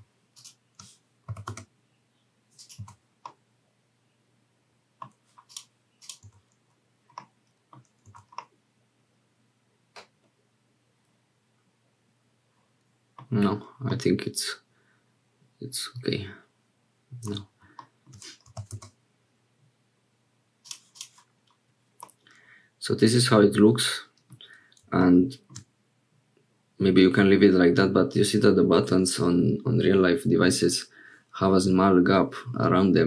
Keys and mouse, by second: 1.2 g, 2.8 Tab, 3.2-5.1 middle drag, 5.5 click, 6.3 Tab, 7.2 middle click, 8.1 Tab, 8.4-13.2 middle drag, 13.9-17.3 drag, 17.8 shift+click, 18.5 g, 22.1-24.4 drag.